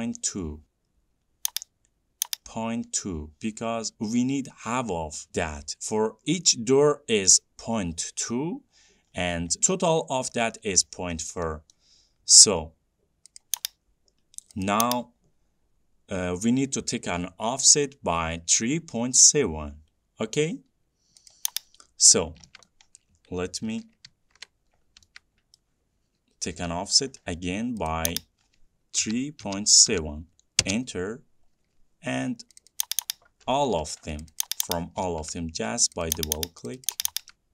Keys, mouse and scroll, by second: 1.6 click, 2.4 click, 9.4-9.8 scroll, 10.3-11.1 scroll, 11.1-12.0 scroll, 13.7 click, 15.0 click, 21.6 click, 22.4-22.8 scroll, 22.9 middle click, 23.1 middle click, 23.9 ctrl+z, 24.4 ctrl+z, 25.0-25.5 scroll, 25.8 middle click, 26.5 scroll, 26.8 f, 27.4-28.2 scroll, 28.2 click, 29.0-30.7 typing, 30.9 Return, 32.9 click, 33.1 click, 33.3 typing, 33.9 Escape, 34.5 click, 34.7 click, 35.1 scroll, 35.7-37.4 middle click, 36.3 click, 36.4 click, 37.0 click, 37.2 click.